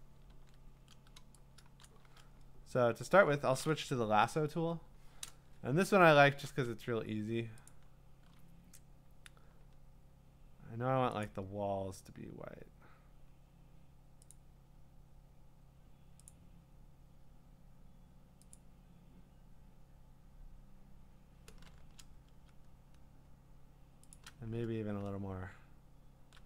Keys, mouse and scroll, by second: 0.3 ctrl+d, 1.7 ctrl+d, 1.8 ctrl+d, 1.8 click, 4.1 i, 5.7-6.2 scroll, 7.7 click, 11.3 click, 16.3 click, 18.5 click, 24.1 shift+click.